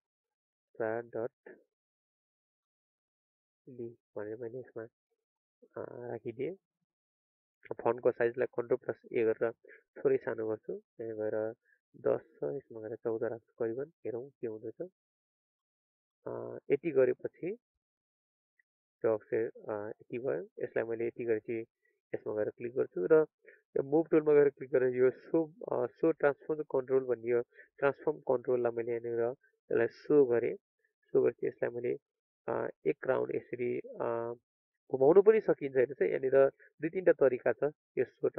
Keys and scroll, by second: 8.3 ctrl+a.